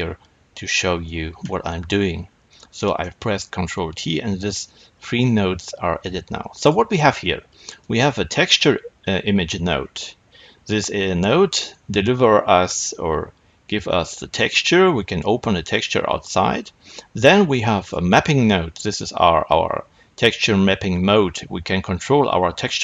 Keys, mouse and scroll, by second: 1.0 n, 2.7-6.5 middle drag, 6.5 click, 7.7-17.8 drag.